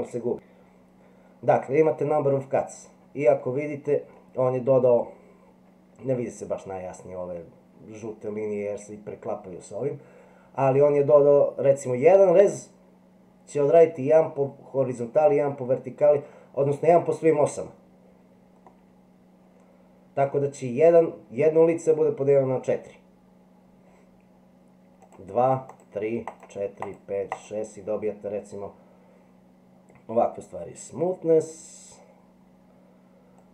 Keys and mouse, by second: 3.4 middle click, 18.8-20.3 middle drag, 25.1 click, 25.7 click, 26.3 click, 26.8 click, 27.3 click, 33.4-33.5 drag.